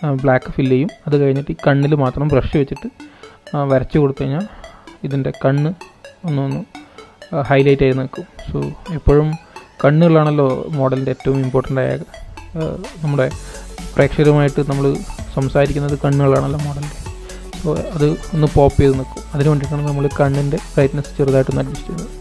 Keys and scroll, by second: 20.7 super+-, 21.0 super+-, 21.4 super+-, 21.8 super+-.